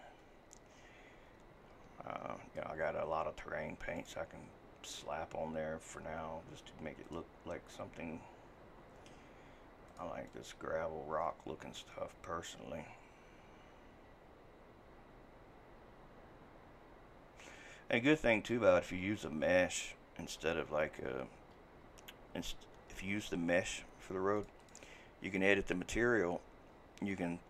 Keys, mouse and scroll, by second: 2.9 scroll, 3.5 scroll, 11.2 typing.